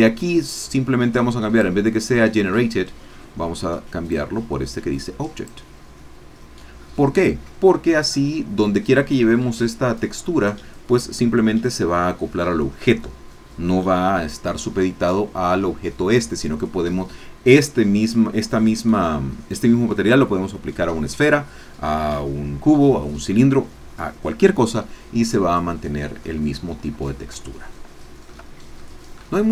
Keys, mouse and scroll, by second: 4.1-5.6 drag, 9.3-10.4 scroll down 1, 10.4 scroll down 1, 26.2-26.5 scroll up 1, 26.5-27.1 scroll down 3, 27.5 shift+middle click, 28.8 shift+middle click, 29.3 shift+middle click.